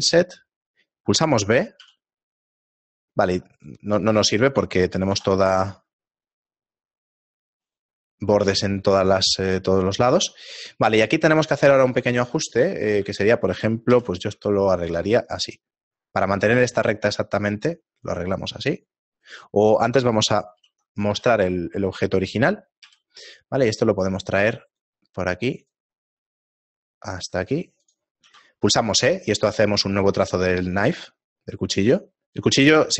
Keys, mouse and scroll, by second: 5.1 i, 8.6 middle click, 9.1-9.7 scroll up 5, 10.3 middle click, 10.3-11.7 scroll up 2, 12.1 ctrl+Tab, 13.0 a, 13.9 k, 19.3 right click, 20.6 alt+h, 21.2 a, 22.8 k.